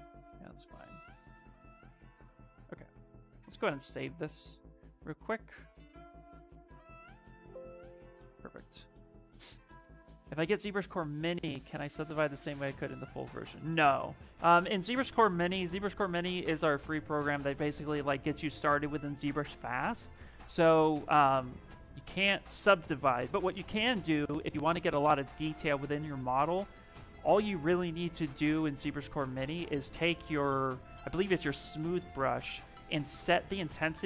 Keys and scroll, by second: 2.0 shift+f, 7.3 Return.